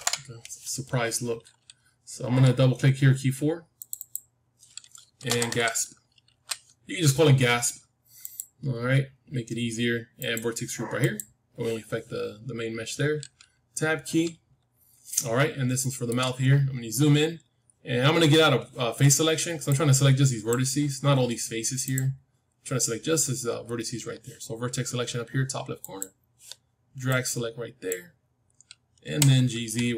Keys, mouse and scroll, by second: 3.7-8.2 drag, 10.1-12.1 drag, 14.0 Tab, 15.0-15.7 scroll up 1, 15.7-17.7 middle drag, 17.7-19.1 scroll up 1, 19.6-21.6 drag, 21.7-23.8 drag, 25.7-29.1 drag, 29.0 g.